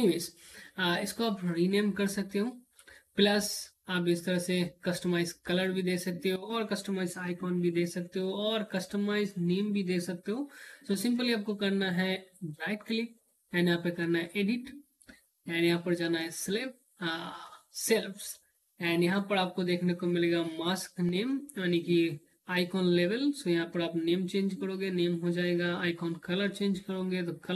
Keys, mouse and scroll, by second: 10.7 right click, 13.4 click, 19.6-23.1 drag.